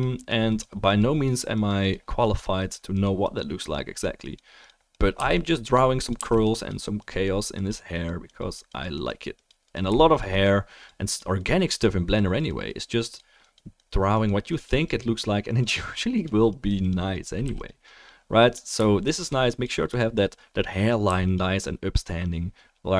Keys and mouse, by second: 5.1 f, 5.4 click, 6.1 f, 6.4 click, 17.4 f, 17.6 drag, 21.0 f, 21.3-22.9 drag.